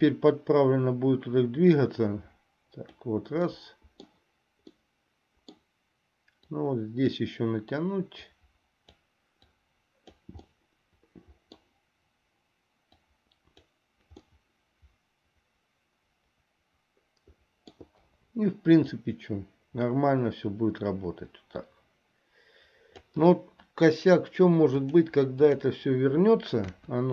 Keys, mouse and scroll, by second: 0.3-3.2 drag, 3.7 middle click, 4.9 middle click, 6.6 click, 8.5 click, 9.7 click, 10.7-11.9 middle drag, 13.1 click, 14.6-18.1 middle drag, 19.2-23.4 drag, 24.9-25.9 drag, 26.8 KP_1.